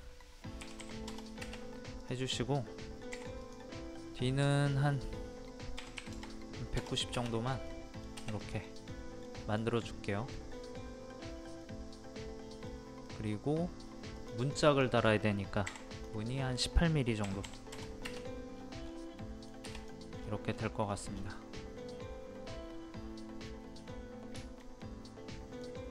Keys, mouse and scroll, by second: 0.6 KP_1, 2.0 click, 3.1 p, 3.4 click, 5.8 KP_1, 7.7 middle click, 8.4 click, 8.7 middle click, 9.6 scroll up 1, 10.0 middle click, 13.5 scroll up 1, 14.1-15.7 drag, 15.7 p, 17.2 KP_1, 18.5 scroll down 1, 19.2 middle click, 19.8 click, 20.2 scroll up 1, 20.5-20.8 scroll down 1, 21.6-23.5 middle drag, 23.5 scroll up 1, 24.4 shift+middle click.